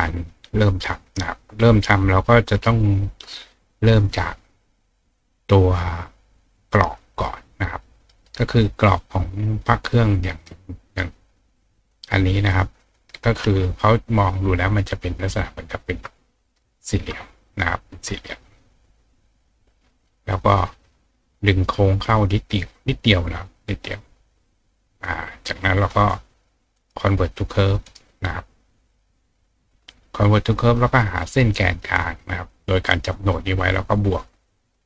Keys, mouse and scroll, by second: 1.9-3.5 drag, 5.0 click, 5.5 click, 6.6-9.6 drag, 11.3-11.9 drag, 12.5 click, 15.2 click, 16.2-19.4 ctrl+drag, 20.3 click, 21.4 click, 26.0 click, 26.8 right click, 27.9 right click, 28.9 click, 30.7 click, 31.8-32.5 drag, 34.6 click.